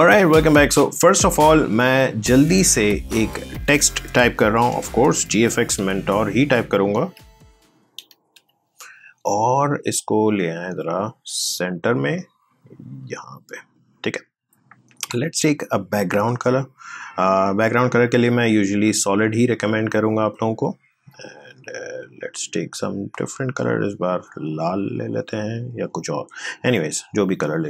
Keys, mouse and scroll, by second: 1.7 click, 5.2 g, 8.1 typing, 10.3 click, 15.0 right click, 15.8 click, 21.4-27.6 drag.